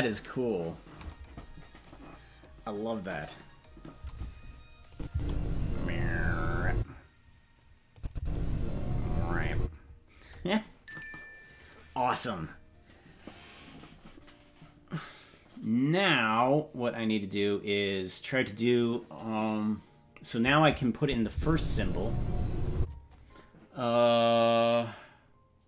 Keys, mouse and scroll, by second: 4.9 click, 5.1 space, 6.7 space, 7.9 click, 8.1 space, 9.5 space, 21.0 click, 21.3 space, 22.7 space.